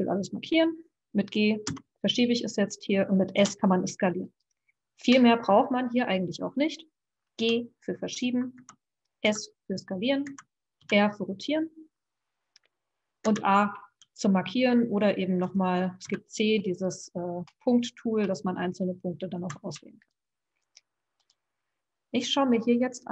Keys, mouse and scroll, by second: 1.7 g, 3.3 s, 7.3 g, 9.3 s, 10.8 r, 16.0 c, 20.0 click, 21.3 click.